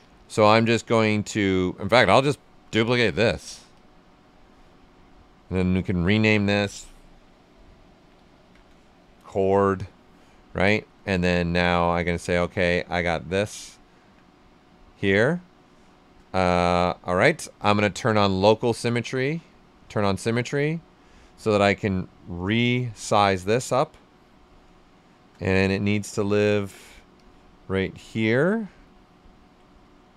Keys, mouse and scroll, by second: 7.7-8.9 typing, 10.5 w, 11.3 right click, 12.0 shift+f, 12.5 right click, 14.0-15.3 typing, 15.1-16.4 right drag, 16.4-18.2 right drag, 18.2 click, 18.6 alt+right click, 19.0 x, 19.9-23.0 shift+drag, 23.0-24.6 drag, 24.6-25.6 right drag, 25.6-27.1 drag, 27.1 click, 28.1 right click, 28.8 ctrl+right click, 29.8-30.1 drag, 29.8 typing.